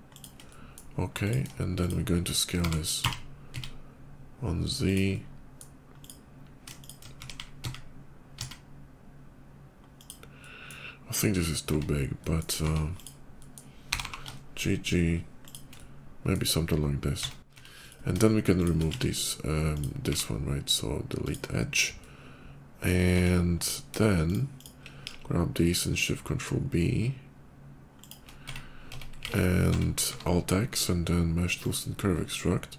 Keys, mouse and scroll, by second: 0.0 shift+click, 0.2 shift+middle click, 1.0 shift+click, 1.5 shift+click, 2.3 s, 2.8 z, 3.0 s, 3.3 z, 4.7 click, 4.9 middle click, 5.8 click, 6.6 click, 7.0 s, 7.4 z, 7.8 s, 9.8 click, 10.2 middle click, 11.6 Tab, 12.0 middle click, 12.7 click, 13.2 middle click, 13.7 g, 13.9 g, 15.3 shift+click, 15.6 middle click, 17.0 Tab, 17.6 Tab, 17.6 click, 18.2 shift+click, 18.9 x, 19.4 click, 21.0 click, 21.8 middle click, 23.4 click, 24.1 shift+click, 24.4 shift+click, 25.0 ctrl+shift+b, 27.8 shift+click, 28.1 Tab, 28.8 Tab, 29.1 alt+x, 29.5 Tab, 29.9 q, 30.6 alt+x, 31.4 click.